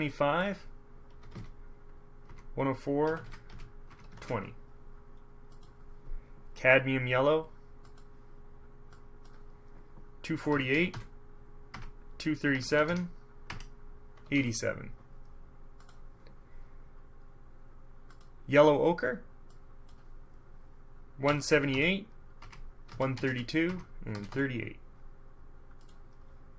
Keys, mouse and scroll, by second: 0.3-0.7 scroll up 2, 1.3 KP_7, 1.5 KP_5, 2.4 Tab, 3.2-4.3 typing, 4.0 Tab, 5.7 click, 8.0 click, 9.1 click, 10.6 KP_2, 10.9 KP_4, 11.0 KP_8, 11.9 Tab, 12.7 KP_2, 13.0 KP_7, 14.4 KP_8, 14.5 KP_7, 16.0 click, 18.3 click, 19.7 click, 21.4 KP_1, 21.7 KP_7, 21.9 KP_8, 22.6 Tab, 23.0-24.4 typing, 23.8 Tab, 26.0 scroll up 1.